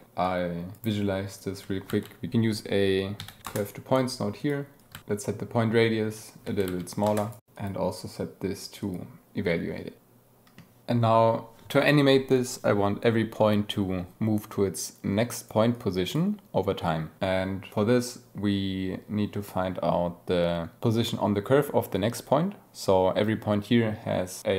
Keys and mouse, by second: 0.2 click, 1.3 click, 1.8 shift+a, 4.3 click, 4.7 click, 4.9 shift+a, 7.5-9.1 drag, 9.9-10.5 drag, 10.8 ctrl+z, 14.9 click.